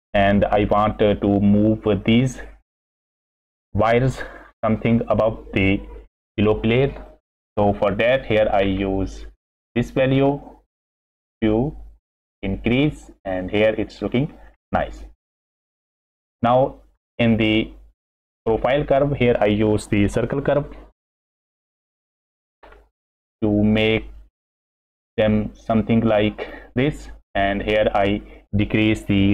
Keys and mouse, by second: 8.2 click, 9.3-13.2 drag, 14.1-14.4 middle drag, 14.9 middle click, 16.3 middle click, 16.9 middle click, 18.4 middle click, 21.9 shift+a, 25.7-26.5 drag, 27.3 click.